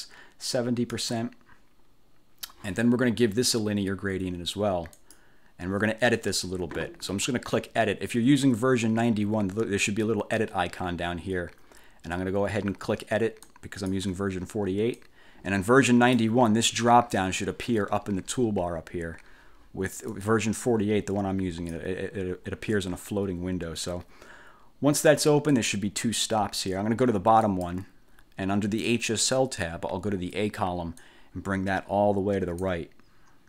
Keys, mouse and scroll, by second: 1.0 click, 5.1 click, 13.6 click, 15.0-16.4 drag, 20.2-22.0 drag, 25.6 click, 27.5 click, 29.0 click, 31.1-32.9 drag.